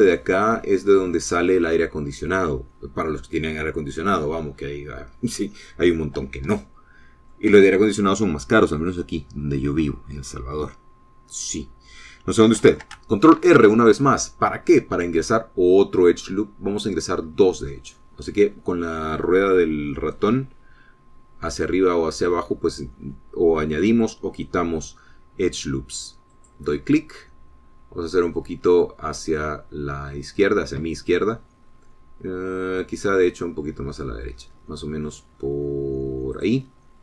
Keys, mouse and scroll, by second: 4.0-5.0 drag, 5.5-6.2 scroll up 2, 7.5 shift+click, 14.3 ctrl+r, 18.2 scroll up 2, 22.7-23.0 scroll down 2, 23.3 scroll up 2, 27.3 click.